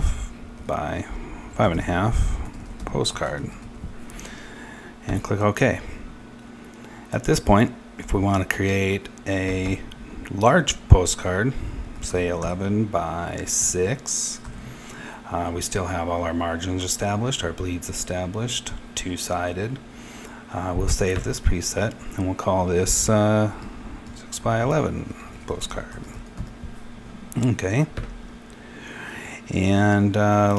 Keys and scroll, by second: 0.0-4.0 typing, 11.6-14.0 typing, 23.2-28.4 typing.